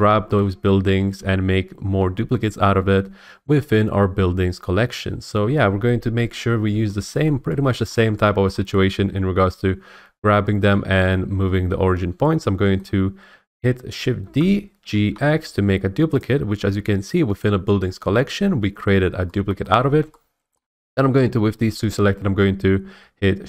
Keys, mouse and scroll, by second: 0.0 click, 0.4 shift+click, 1.8 scroll, 2.4 scroll up 1, 7.2-7.9 scroll, 7.9 middle click, 7.9 scroll, 8.5 shift+middle click, 12.8 middle click, 14.2 shift+d, 14.8 g, 15.1 x, 16.2 click.